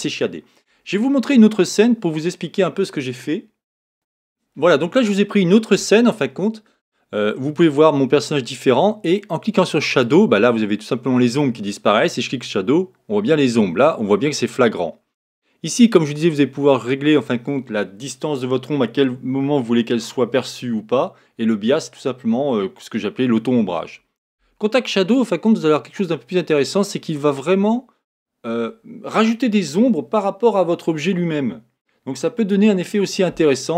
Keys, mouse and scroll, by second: 10.5 click, 12.1 click, 25.6 click, 26.8-27.2 scroll up 1, 28.5-29.7 scroll up 2.